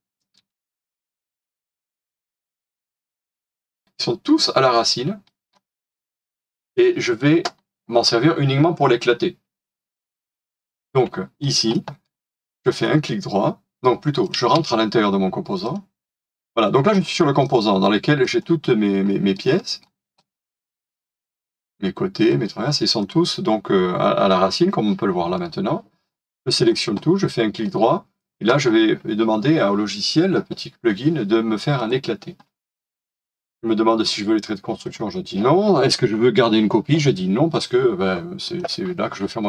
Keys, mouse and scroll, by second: 10.7 shift+middle click, 12.1 shift+middle click, 12.7 right click, 14.4 space, 16.1 double click, 19.0 middle click, 19.6-22.7 scroll up 1, 25.4 scroll down 1, 27.6 right click.